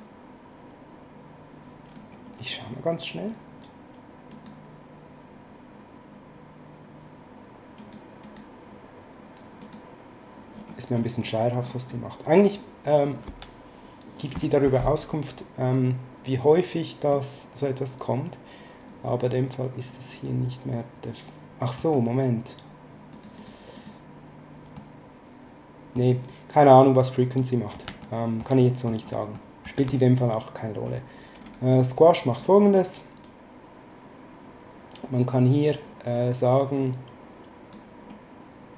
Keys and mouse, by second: 4.3 click, 7.7 click, 9.6 click, 17.1 middle click, 23.1 click, 24.7 middle click, 27.4 middle click, 28.0 shift+middle click, 29.3 shift+middle click, 33.2 click.